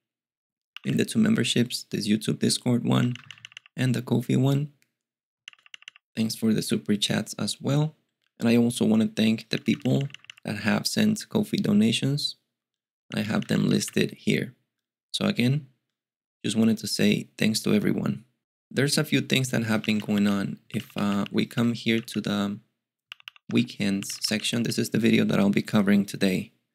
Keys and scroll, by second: 0.7 typing, 3.0-3.5 typing, 5.4-5.8 typing, 9.5-10.2 typing, 13.1-13.8 typing, 19.4-25.1 typing.